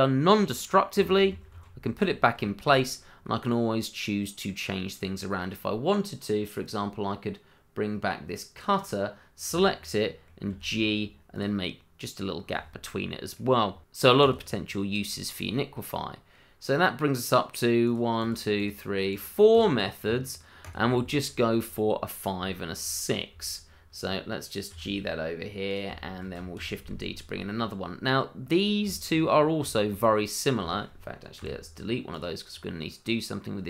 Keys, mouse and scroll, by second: 1.1 ctrl+z, 2.4 shift+middle click, 2.5 middle click, 2.6 shift+middle click, 2.8-3.2 scroll up 1, 3.2 middle click, 6.6 click, 8.7 click, 9.9 click, 10.0 middle click, 10.5 g, 11.3 click, 11.7 middle click, 13.7-15.2 scroll down 1, 15.3 click, 15.4 scroll down 1, 16.2 middle click, 17.8 click, 18.3 double click, 19.1 click, 19.6 double click, 20.6 click, 21.0 shift+middle click, 21.1 middle click, 21.2 shift+middle click, 22.5 shift+middle click, 22.6 middle click, 22.6 shift+middle click, 25.7 click, 25.9 shift+middle click, 26.0 middle click, 26.1 shift+middle click, 26.5 shift+d, 28.5 click, 28.9 shift+middle click, 29.1-29.7 scroll up 1, 29.7 shift+middle click, 29.8 middle click, 29.8 shift+middle click, 30.0-30.6 scroll up 1, 30.7 middle click, 30.7 shift+middle click, 31.3 Delete, 32.1 click, 32.5-33.2 scroll up 1.